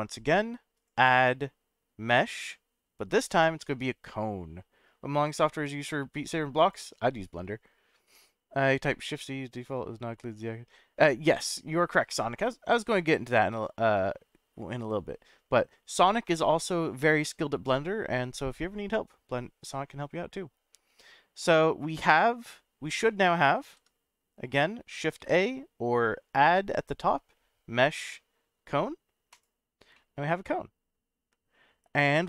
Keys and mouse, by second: 0.8-6.7 drag, 14.0-15.6 middle drag, 23.6 ctrl+z, 25.2 shift+a, 29.9-31.5 middle drag.